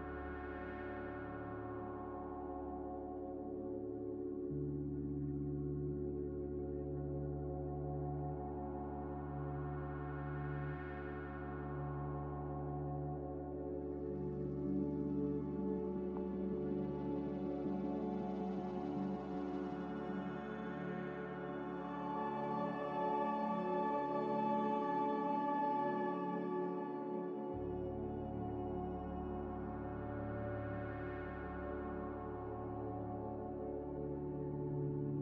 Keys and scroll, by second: 3.7 5, 13.5 5, 32.3 ctrl+z.